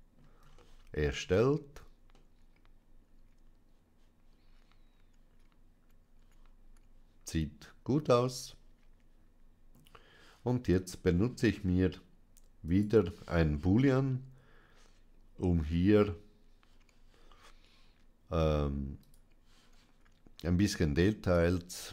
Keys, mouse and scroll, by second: 0.5 shift+middle click, 2.0-9.2 shift+middle drag, 12.5 click, 18.9 click, 21.1 click.